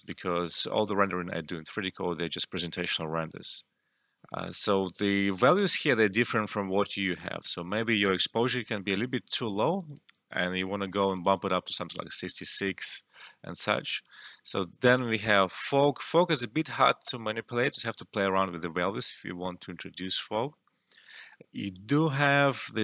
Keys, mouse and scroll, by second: 7.0 click, 8.9 1, 9.1 Return, 9.7 click, 11.0 typing, 11.4 Return, 15.8-22.8 drag.